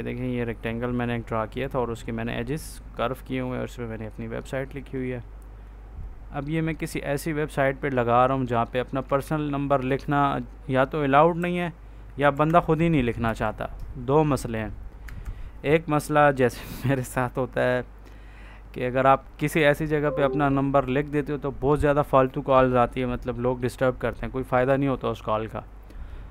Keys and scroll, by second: 9.1 ctrl+s, 11.3 Up, 12.2 F4, 13.1 ctrl+s, 14.9 Escape.